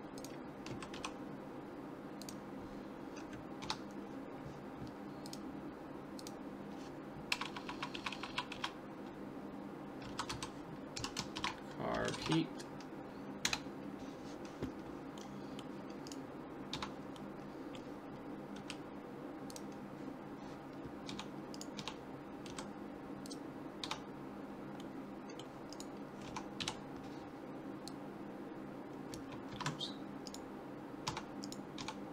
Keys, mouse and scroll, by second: 0.7 s, 3.6 Tab, 5.3 click, 7.5 BackSpace, 7.6 BackSpace, 8.0 BackSpace, 8.3 BackSpace, 15.3-17.1 middle drag, 16.1-17.8 right drag, 16.7 Tab, 17.4-19.2 middle drag, 18.6 s, 21.1 Tab, 21.6-23.4 right drag, 21.8 Tab, 22.5 s, 23.9 Tab, 24.4-26.8 middle drag, 25.7-27.7 right drag, 26.3 Tab, 26.6 KP_7, 27.9 click, 29.5 ctrl+z, 30.3-32.1 right drag, 31.1 Tab, 31.8 Tab.